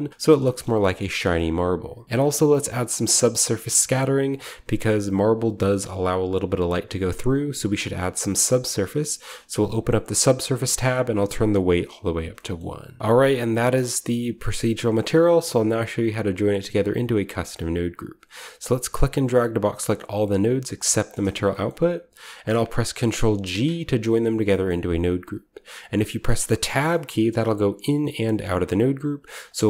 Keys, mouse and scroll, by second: 0.2-2.0 scroll down 1, 0.3 shift+middle click, 1.3-2.0 shift+middle drag, 2.0-4.7 drag, 9.6-13.0 drag, 12.5-13.8 shift+middle drag, 12.9-14.5 scroll down 1, 13.8 a, 14.5-14.9 scroll down 1, 14.5 a, 14.9-18.5 middle drag, 18.6-20.9 drag, 21.4 middle click, 23.4 ctrl+g, 23.9-26.5 scroll up 1, 24.4 middle click, 27.0-28.3 middle drag, 27.6 Tab, 28.1 Tab, 28.4-29.6 scroll up 1, 28.6-29.4 middle drag, 29.1 Tab.